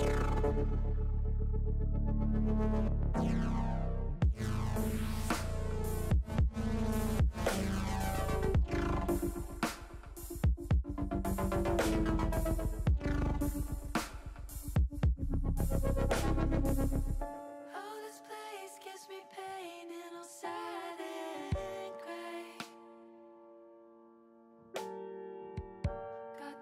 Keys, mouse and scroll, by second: 0.9-4.1 middle drag, 6.4 l, 8.6 click, 11.4 click, 13.1 click, 14.1 click, 14.3-17.4 drag, 15.6 e, 17.5 click, 22.9 l.